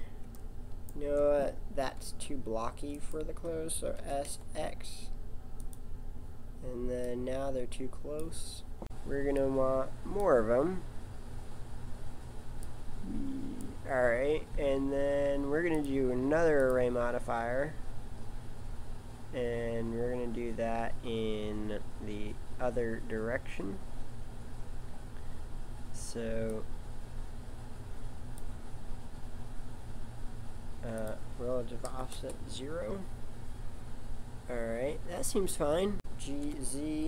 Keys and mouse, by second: 2.0 s, 3.9 s, 7.1 click, 10.5 click, 12.6 click, 14.3 click, 17.6 middle click, 26.5 click, 31.0 click, 35.9 g, 36.3 g.